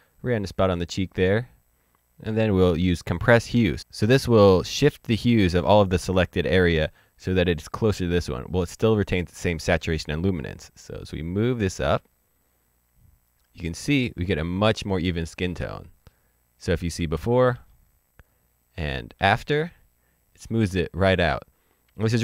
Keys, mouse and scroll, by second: 10.7 click, 14.0-14.5 scroll up 2, 15.5 middle click, 17.5 ctrl+d, 19.1 ctrl+d.